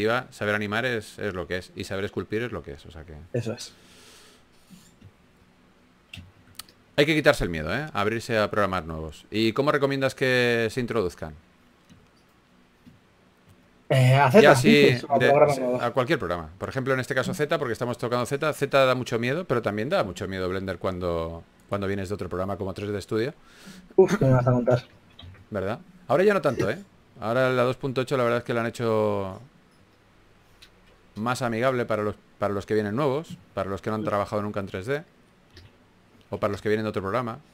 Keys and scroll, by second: 0.1 typing, 2.1-3.0 typing, 7.7 typing, 13.5 s, 15.0-18.7 typing, 21.9 3, 23.0-23.8 typing, 25.2-26.4 typing, 37.0 s.